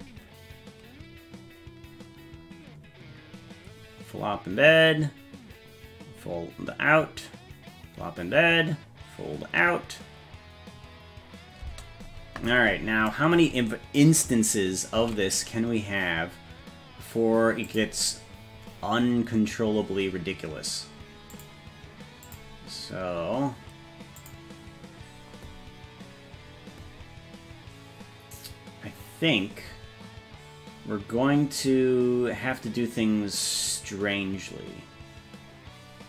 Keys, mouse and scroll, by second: 11.6 space, 15.1 ctrl+s, 17.7 click, 21.3 click, 22.2 click, 24.2 click.